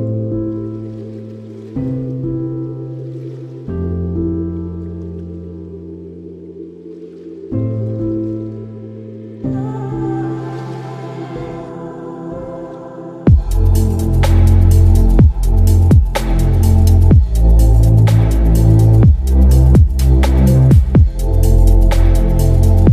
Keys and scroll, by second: 13.5 space.